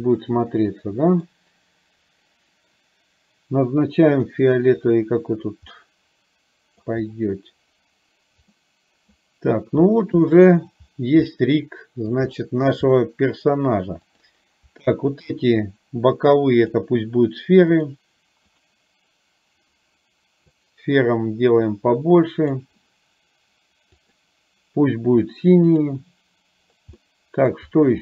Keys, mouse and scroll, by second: 5.8-7.0 middle drag, 8.6-9.1 middle drag, 10.3-10.7 shift+middle drag, 11.5-12.2 middle drag, 14.2 click, 15.3 shift+click, 16.7-18.0 drag, 18.6 click, 20.6-22.7 drag, 25.7 click, 27.0-27.6 middle drag.